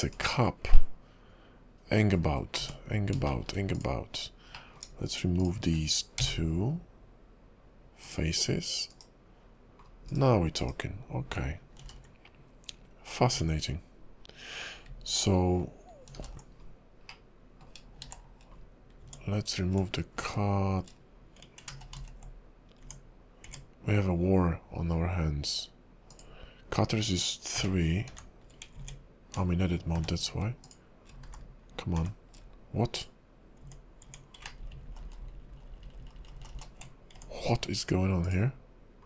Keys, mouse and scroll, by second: 0.2 /, 0.9 middle click, 2.4-2.7 scroll up 3, 2.6 Tab, 3.4 shift+middle click, 3.7 click, 4.7 middle click, 5.4 shift+click, 6.2 x, 8.9 /, 10.0 scroll down 2, 10.2 /, 10.6 /, 11.8 alt+h, 12.9-13.3 scroll down 4, 13.3 Tab, 16.2 alt+h, 16.7-17.2 scroll up 2, 17.2 middle click, 17.8 scroll down 1, 18.1 shift+2, 18.7-19.0 scroll down 3, 19.0 Tab, 19.7 shift+2, 20.2 shift+3, 21.8 ctrl+z, 22.2 ctrl+z, 22.8 Tab, 23.4 Tab, 26.1 click, 27.6 shift+3, 28.1 shift+3, 28.7 Tab, 29.9 shift+3, 30.6 click, 31.3 shift+3, 31.3 shift+2, 32.0 shift+3, 32.9 click, 33.6 Tab, 34.0 Tab, 34.7-36.5 ctrl+z, 37.1 Tab, 37.8-38.2 scroll up 3, 38.2 click.